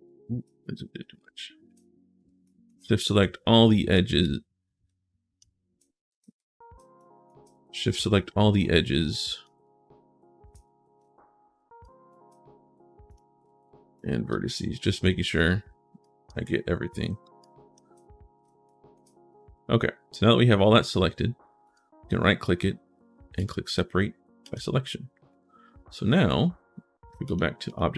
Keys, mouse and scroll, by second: 0.3 middle click, 0.6 scroll down 1, 0.9 shift+right click, 1.8 right click, 2.3 shift+click, 4.0-5.2 drag, 6.0 ctrl+z, 6.8 shift+click, 7.3 middle click, 7.8 shift+Caps_Lock, 8.9 shift+click, 11.6 shift+click, 12.8 click, 13.7 shift+click, 15.8 shift+click, 17.2 shift+click, 18.4 shift+click, 19.2-19.7 scroll up 1, 20.3-21.2 scroll up 1, 21.4 right click, 23.2 click, 24.2 click, 25.5 scroll up 1, 27.1 click, 27.5 click.